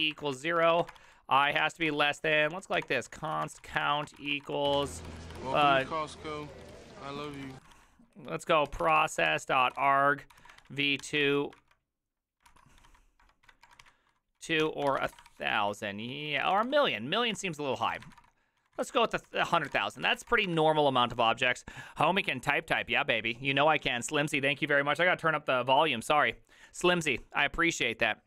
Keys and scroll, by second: 0.0-10.6 typing, 6.1 ctrl+c, 10.3 ctrl+n, 10.4 ctrl+y, 11.0 Tab, 11.2 ctrl+c, 11.6 ctrl+c, 12.5 ctrl+c, 12.9-20.7 typing, 14.6 Tab, 19.3 ctrl+c.